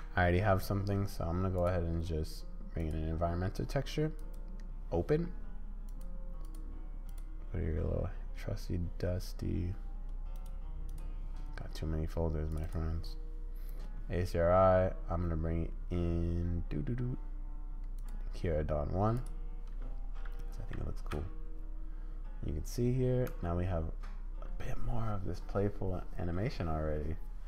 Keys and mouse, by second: 1.7-3.0 drag, 4.2 click, 20.7 z, 23.3 space.